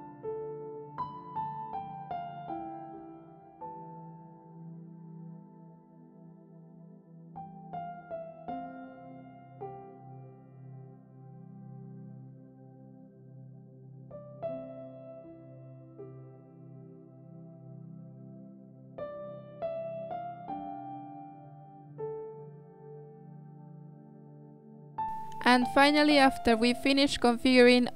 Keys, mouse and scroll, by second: 0.0-1.9 drag, 1.9 z, 2.7 click, 4.4-6.3 drag, 6.3 z, 7.0-8.1 drag, 8.9-11.0 drag, 12.7-13.0 scroll down 9, 13.0 click, 13.5 drag, 14.1 click, 15.7-17.0 scroll down 3, 15.9 click, 17.2 click, 20.3-22.0 drag, 22.6 click, 23.1-24.7 drag, 24.7 z, 25.9 z.